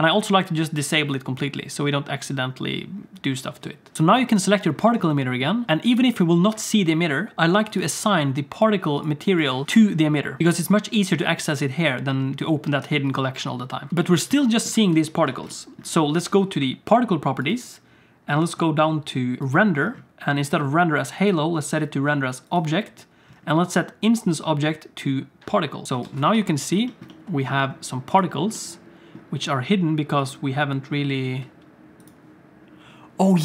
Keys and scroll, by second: 3.9 alt+a, 3.9 ctrl+s, 3.9 Tab, 5.7 ctrl+z, 14.8 alt+shift+z, 15.3 alt+shift+z, 16.3 ctrl+s, 26.0 alt+a, 26.4 ctrl+s.